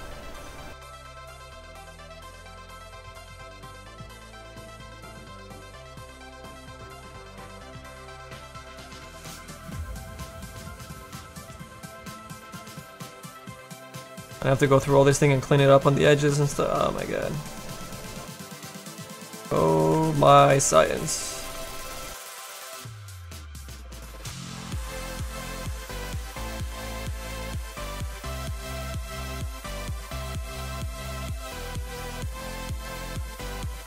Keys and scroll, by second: 1.6 s, 7.3 s, 7.8 s, 8.7 s, 19.9 s, 21.2 s, 24.3 s.